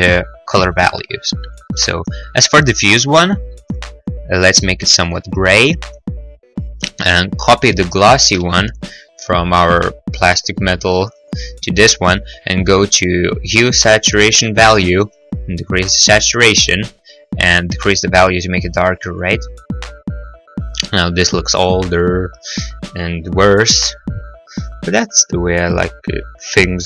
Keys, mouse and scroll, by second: 0.2 click, 4.1 click, 5.2 click, 8.9 ctrl+c, 10.6 ctrl+v, 11.5 click, 15.7 click, 21.4 middle click, 21.6 middle click, 21.6-22.3 scroll, 22.7-23.0 scroll.